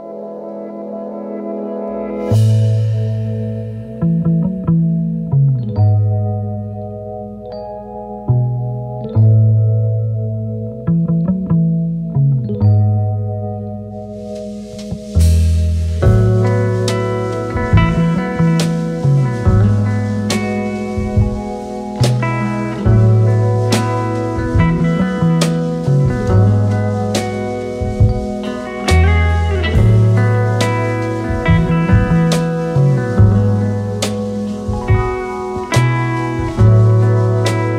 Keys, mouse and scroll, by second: 0.0-3.7 typing, 5.1 typing, 6.9-7.6 typing, 7.7-8.0 alt+scroll down 1, 8.7 alt+scroll down 1, 9.4-9.8 space, 14.4-17.2 typing, 19.3 alt+shift+click, 21.1 typing, 22.2-24.7 typing, 25.8 typing, 27.3 typing, 28.3 typing, 36.1-37.7 typing.